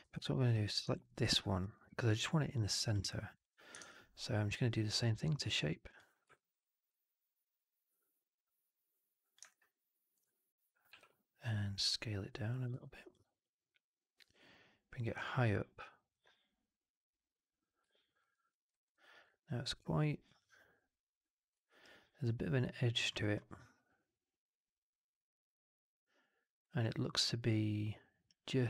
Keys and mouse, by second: 0.3 click, 0.8 alt+middle drag, 1.0 alt+right drag, 1.2 alt+click, 1.6 alt+middle drag, 2.7-3.5 drag, 3.7 shift+Tab, 6.2 drag, 6.8-9.3 drag, 9.4-10.0 alt+drag, 10.8 r, 11.6 click, 12.6 w, 13.0-15.0 drag, 15.1-16.0 drag, 18.2 alt+middle click, 18.4 alt+middle click, 18.6 alt+right click, 18.8 alt+click.